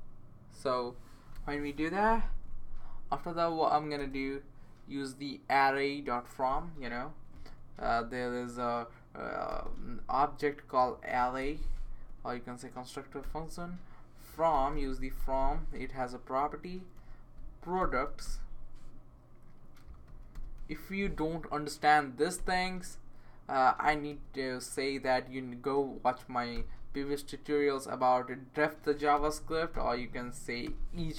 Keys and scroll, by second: 1.3 BackSpace, 2.0 Right, 2.2 Right, 2.4 Right, 4.0 Return, 8.2 shift+a, 9.5 r, 9.6 r, 10.8-11.9 typing, 14.3-18.7 typing, 20.1-21.1 typing, 24.1 s, 24.9 Tab, 26.5 ., 29.1-31.1 typing.